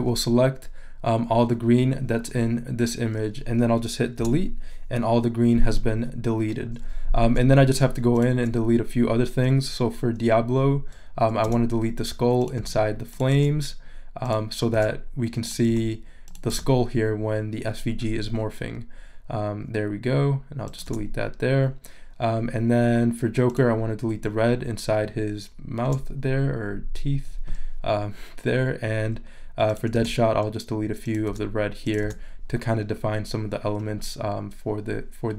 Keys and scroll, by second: 4.2 BackSpace, 11.4 BackSpace, 12.6 BackSpace, 14.7 BackSpace, 20.8 BackSpace, 25.8 BackSpace, 29.9 BackSpace, 31.3 BackSpace.